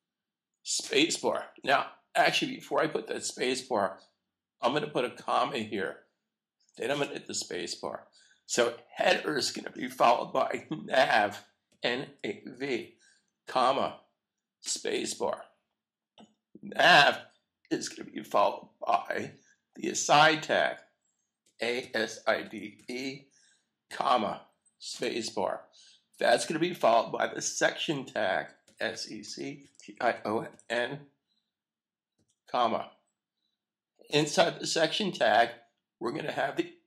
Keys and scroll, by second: 5.1 ,, 11.9 n, 13.7-14.4 typing, 21.9 a, 23.9 typing, 25.9 ,, 29.9 typing, 31.7-32.4 typing, 33.9 ,.